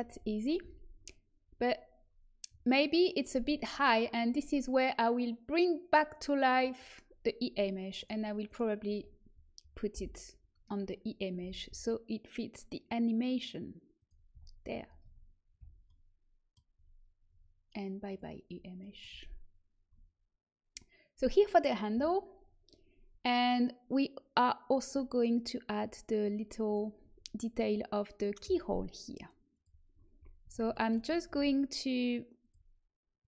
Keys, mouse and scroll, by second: 0.5 z, 6.4 click, 7.9 click, 8.8 Tab, 9.9 l, 11.3 g, 14.2 z, 14.9 Tab, 15.5 z, 18.5 click, 19.1-20.2 middle drag, 30.5 Tab, 31.2 a, 32.3-33.2 drag.